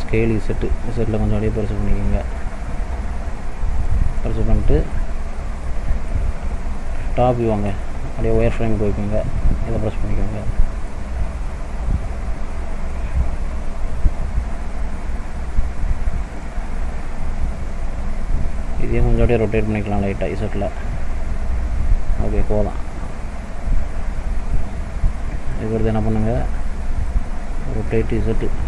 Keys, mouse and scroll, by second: 4.2 middle click, 5.2-5.7 scroll down 1, 5.7 middle click, 6.7 KP_7, 7.8 shift+middle click, 9.8 click, 10.5 middle click, 12.9 KP_7, 15.0 click, 19.2 r, 22.6 click, 25.1 shift+middle click, 25.7 scroll up 1, 26.5 scroll up 2, 26.7 shift+middle click, 27.9 r.